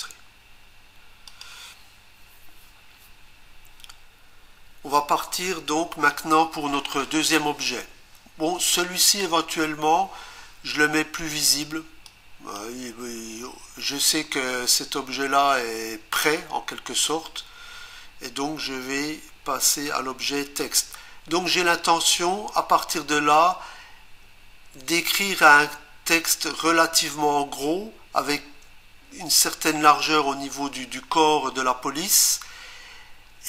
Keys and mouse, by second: 12.1 click.